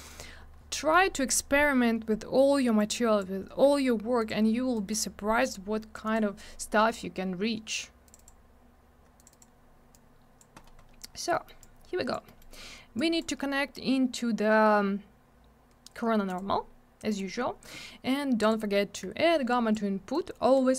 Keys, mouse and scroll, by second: 0.0 click, 0.0 click, 0.1 double click, 2.7 click, 4.1 click, 4.2 click, 4.7 click, 4.9 click, 5.4 click, 6.0 click, 6.1 click, 8.0 click, 8.1 click, 8.1 click, 8.2 click, 9.1 click, 9.2 click, 9.3 click, 9.3 click, 9.9 click, 10.5-11.0 scroll up 1, 11.0 scroll down 1, 11.3 middle click, 11.4 middle click, 11.5 click, 12.2 middle click, 12.3 middle click, 12.9 click, 16.2 click, 16.3 click, 17.1 click, 17.1 click, 18.3 click, 18.4 click, 19.5 click, 20.1 click, 20.6-20.7 scroll up 1.